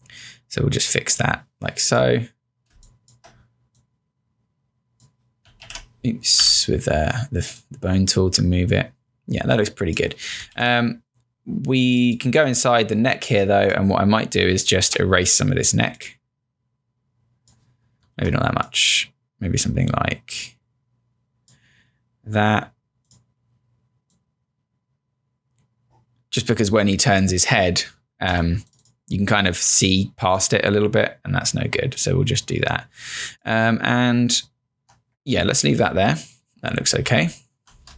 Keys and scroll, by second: 2.8 space, 5.7-7.0 typing, 10.6 z, 14.9 e, 18.2 z, 28.4 v, 37.1 z.